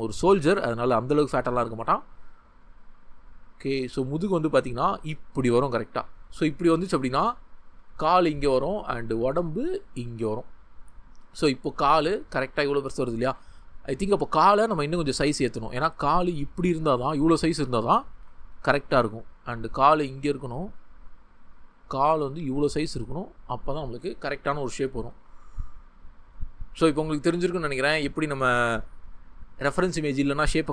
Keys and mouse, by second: 10.5 shift+middle click, 13.2 ctrl+z, 19.2-21.2 drag.